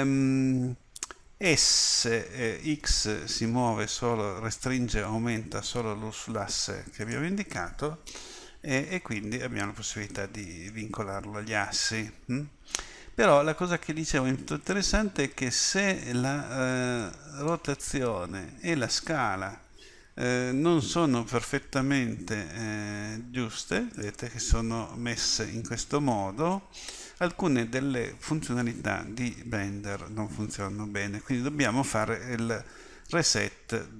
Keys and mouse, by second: 2.1 s, 17.0-22.4 drag, 22.4 r.